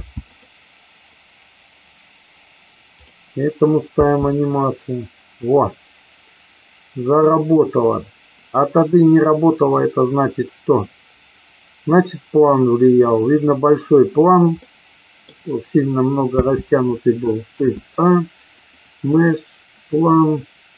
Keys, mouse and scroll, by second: 0.4 click, 2.9 click, 3.9 space, 14.7 middle click, 16.4 space, 17.5 shift+a.